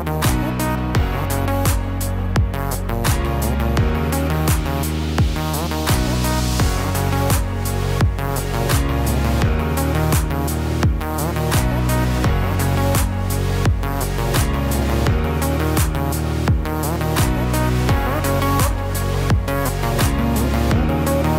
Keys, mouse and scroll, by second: 0.2 scroll down 1, 0.7 middle click, 2.2 KP_1, 2.9-3.4 scroll down 2, 3.4 shift+middle click, 4.0-4.7 scroll up 2, 5.3-5.9 scroll up 1, 6.3 middle click, 11.2 middle click, 12.1 scroll down 2, 12.4 middle click, 15.0 KP_3, 16.2 KP_1, 19.8 shift+a.